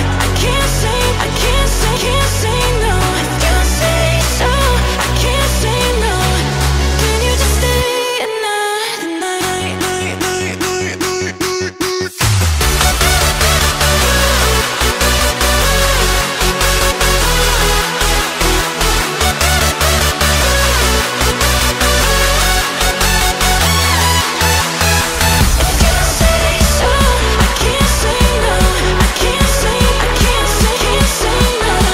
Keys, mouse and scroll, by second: 3.2 alt+click, 3.5 middle click, 4.1 alt+click, 4.9 alt+click, 6.0 f, 8.4 middle click, 9.1 alt+click, 9.8 shift+middle click, 10.1 scroll up 1, 10.2-11.5 scroll down 1, 11.5 f, 11.9 middle click, 12.7-13.1 scroll up 1, 13.1-14.2 shift+middle drag, 14.2 ctrl+b, 16.7 Tab, 17.1 KP_1, 17.7 Tab, 18.5 alt+z, 18.8 click, 20.0 g, 21.0 click, 21.8 scroll up 2, 22.0 g, 24.0 Tab, 24.5 alt+z, 24.7-26.0 middle drag, 26.0-29.1 drag, 29.1-30.7 right drag, 30.7 click, 31.5-31.9 middle drag.